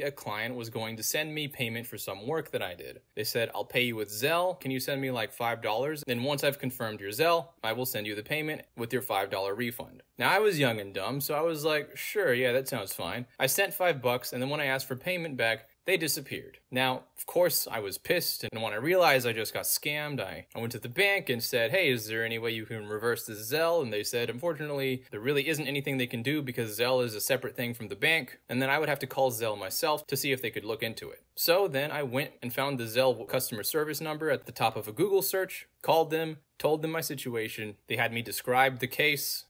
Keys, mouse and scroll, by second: 1.3 click, 4.5 click, 6.8 click, 8.7 click, 9.8 middle click, 9.8-10.3 scroll down 2, 10.5 click, 12.5 click, 14.1 click, 14.6 middle click, 14.6 scroll down 2, 15.1 click, 17.3 click, 17.8 scroll down 2, 18.7-20.1 scroll down 2, 20.8 click, 21.8 click, 22.3 scroll down 2, 22.9 click, 23.8 click, 24.2 scroll down 2, 25.0 click, 26.7 click, 27.1-27.6 scroll down 2, 28.1 click, 28.6 scroll down 2, 28.7 middle click, 29.6 click, 30.6 ctrl+a, 31.4-31.9 scroll down 1, 32.1 middle click, 32.1 scroll down 2, 32.2-32.8 scroll up 2, 32.9-34.4 middle drag, 32.9-33.5 scroll up 2, 33.5-34.4 scroll up 1, 39.1 middle click, 39.1 scroll up 2, 39.2-39.4 scroll down 2.